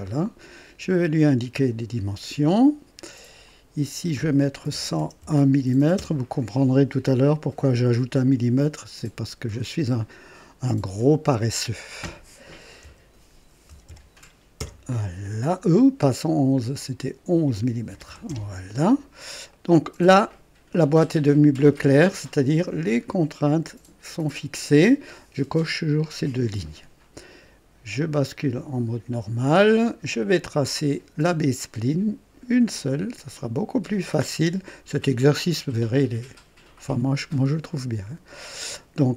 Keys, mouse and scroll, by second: 0.0 right click, 0.9 right click, 2.4 click, 3.4 click, 4.7 KP_1, 4.9 KP_0, 5.2 KP_1, 5.9 KP_Enter, 5.9 Return, 8.2 click, 10.9 click, 12.8-14.5 typing, 16.7 click, 17.9-18.2 typing, 19.5 right click, 28.3 click, 30.4 click, 34.4 click, 37.0 click.